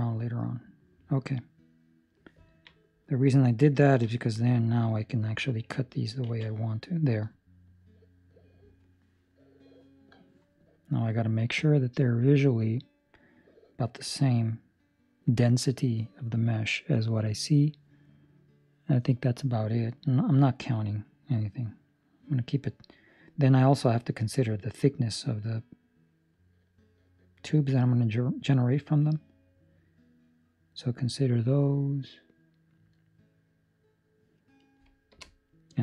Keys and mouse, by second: 2.4 ctrl+middle click, 2.7 middle click, 3.8 ctrl+middle click, 4.3 middle click, 4.7 middle click, 5.0 ctrl+middle click, 6.2 ctrl+r.